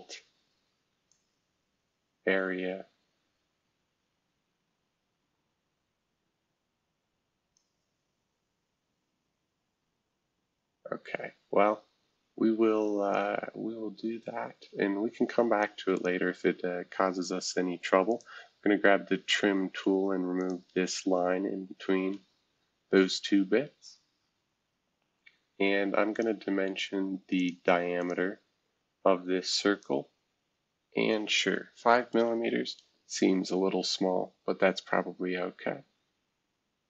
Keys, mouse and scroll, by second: 1.1-9.0 drag, 9.4-10.5 scroll down 1, 10.5-11.1 scroll down 1, 11.1-12.8 scroll down 1, 12.8 scroll down 1, 13.1-17.5 drag, 18.1-19.7 drag, 20.4-22.0 drag, 22.1 Escape, 26.1-31.3 drag, 31.9 5, 32.2 Return, 35.3-36.2 scroll down 1, 36.2-36.8 scroll down 1.